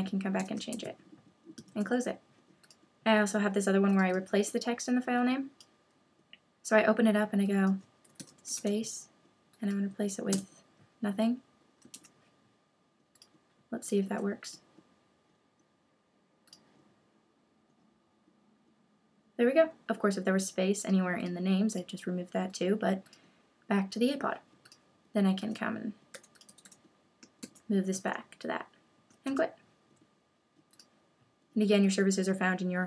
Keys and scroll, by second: 0.7 super+s, 1.7 super+w, 11.9 super+s, 27.4 super+s, 29.3 super+q.